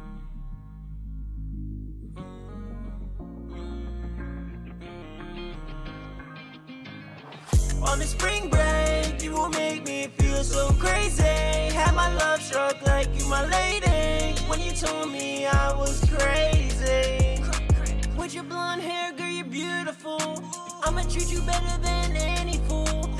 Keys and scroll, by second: 1.4 shift+super+g, 12.3 super+Tab.